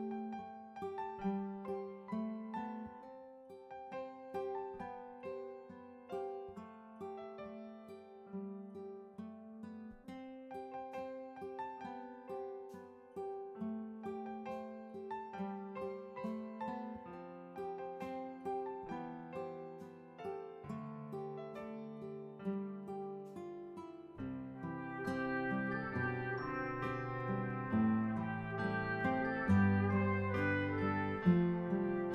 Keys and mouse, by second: 0.0 ctrl+d, 1.1 click, 6.6 ctrl+d, 7.2 ctrl+d, 10.5 click, 12.1 ctrl+d, 13.4 click, 14.6 click, 15.9 Delete, 17.8 click, 19.8 click, 20.2 ctrl+a, 20.7-21.9 typing, 23.9 click, 25.5 click, 27.6 ctrl+d, 29.1 click, 30.4 click, 30.9-32.1 typing.